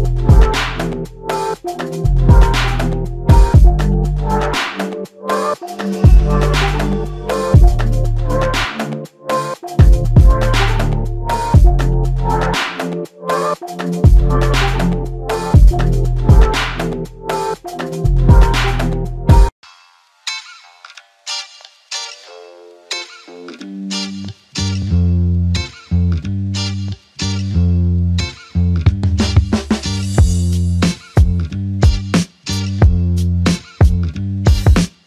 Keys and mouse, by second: 5.0-5.7 typing, 7.4 ctrl+alt+click, 8.4 alt+click, 18.3 double click, 27.4 alt+click, 28.4 ctrl+click, 30.3 alt+click, 32.1 shift+click, 33.4 alt+shift+click, 34.1 ctrl+click.